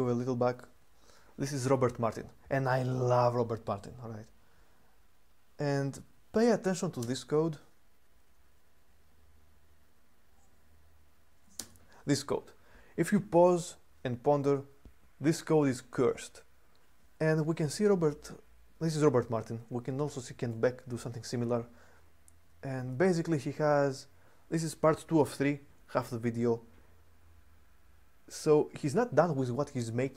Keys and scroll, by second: 1.3-2.1 typing, 6.8 space, 11.4 space, 20.3 j.